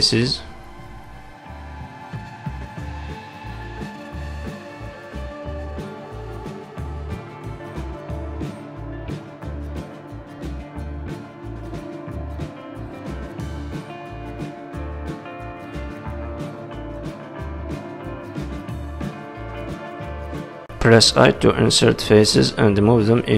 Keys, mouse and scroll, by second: 0.8 click, 1.6 click, 2.5 KP_3, 3.1 z, 4.0-4.4 scroll up 3, 6.7 ctrl+click, 8.6 scroll up 1, 9.6 g, 14.2 middle click, 15.6 z, 16.0 middle click, 18.5 middle click, 20.1 middle click, 20.1-20.7 scroll down 2, 21.1 i.